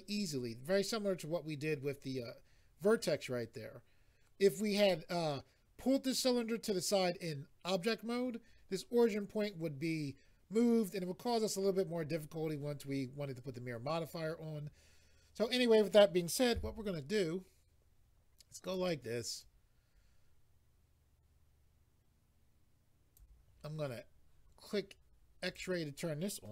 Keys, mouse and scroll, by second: 14.6-15.8 scroll up 3, 18.6 click, 19.4 click, 25.4 click.